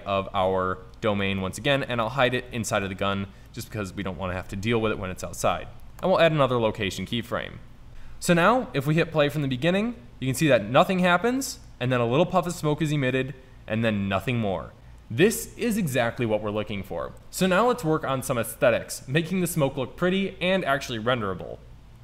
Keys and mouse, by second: 1.7 middle drag, 3.1 middle click, 4.5 i, 7.9 Left, 7.9 Right, 12.9-15.0 middle drag.